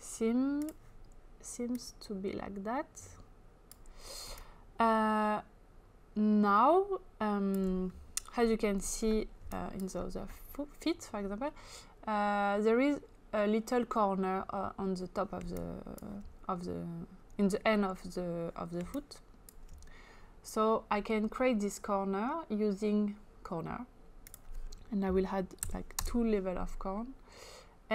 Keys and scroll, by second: 9.5 space, 15.4 space, 19.2 space, 25.7 2, 26.0 Return.